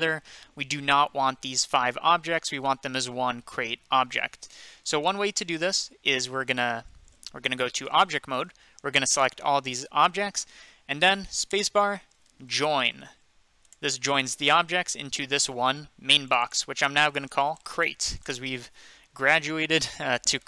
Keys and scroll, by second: 7.9 Tab, 8.8 typing, 12.4-13.6 typing, 13.7 Return, 16.7-18.5 typing.